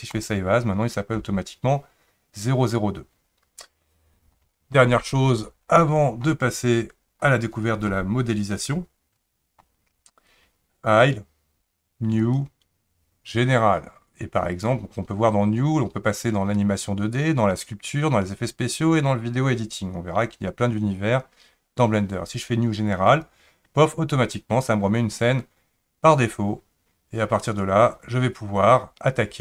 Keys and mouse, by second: 11.0-13.4 drag, 14.6-23.3 drag.